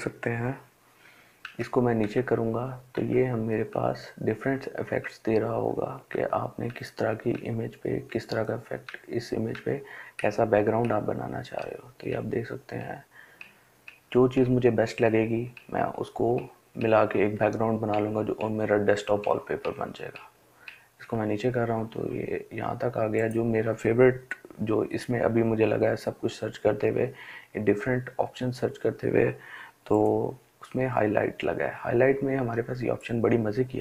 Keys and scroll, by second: 0.7 Down, 1.3 Down, 2.2 Down, 3.0 Down, 3.7 Down, 4.8 Down, 5.4 Down, 6.6 Down, 7.4 Down, 8.1 Down, 9.5 Down, 10.1 Down, 11.4 Down, 12.1 Down, 13.1 Down, 13.6 Down, 14.3 Down, 15.2 Down, 15.7 Down, 16.6 Down, 17.2 Down, 18.5 Down, 18.9 Down, 19.4 Down.